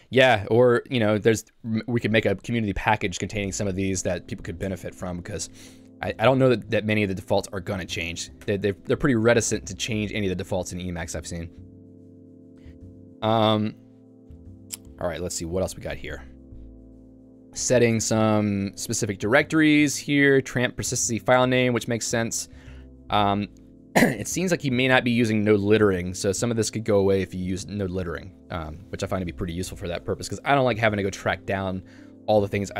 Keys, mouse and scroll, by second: 0.4 Escape, 8.3 click, 8.5 Escape, 11.6 k, 12.5 j, 14.4-15.4 typing, 18.3 k, 19.5 j, 20.3-21.5 l, 22.9 j, 24.9 ctrl+d, 25.6 ctrl+d, 26.9 ctrl+u, 27.4 ctrl+u.